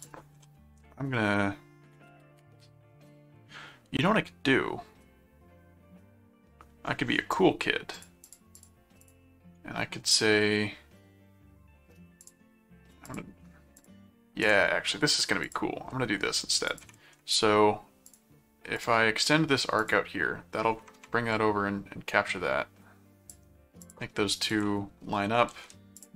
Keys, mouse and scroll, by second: 0.0 click, 0.3 s, 7.3 right click, 7.9-9.5 drag, 12.2 click, 13.0 click, 13.7 click, 14.4 click, 15.4 click, 16.7 click, 18.1 click, 18.8 click, 19.7 click, 21.3-23.3 drag, 23.8 ctrl+click, 24.5 ctrl+click, 25.5 alt+a, 25.9 click.